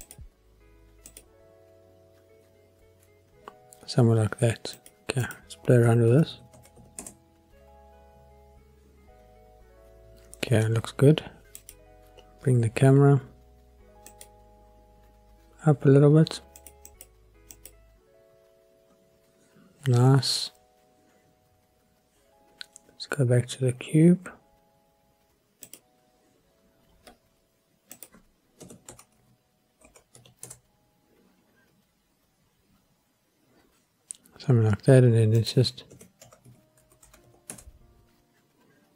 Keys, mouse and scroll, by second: 0.0 click, 5.2-7.0 drag, 11.6 click, 14.1 click, 16.6 click, 16.9 click, 17.5 click, 25.6 click, 27.9-30.6 drag, 35.4-37.6 drag, 37.0 KP_0.